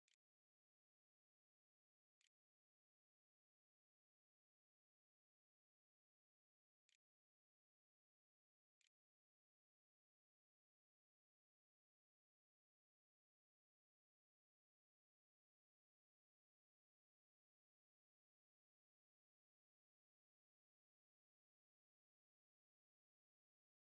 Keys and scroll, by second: 0.0-2.0 typing, 3.7 r, 5.7-9.3 typing.